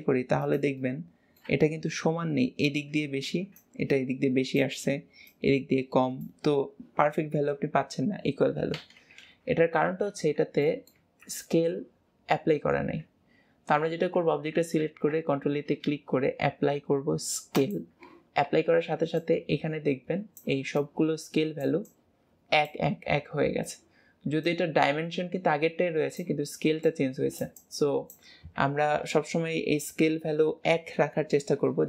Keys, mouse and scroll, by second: 0.9-2.2 middle drag, 2.2-6.2 scroll up 1, 6.2-9.1 scroll up 1, 10.7 middle click, 11.1 Tab, 11.5-31.8 middle drag.